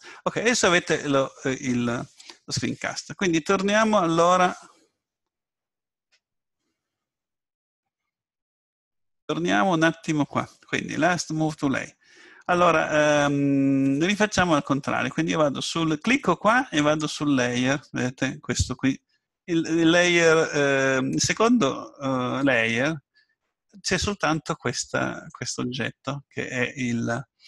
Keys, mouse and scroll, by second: 16.8-18.7 drag, 25.3-27.1 right drag.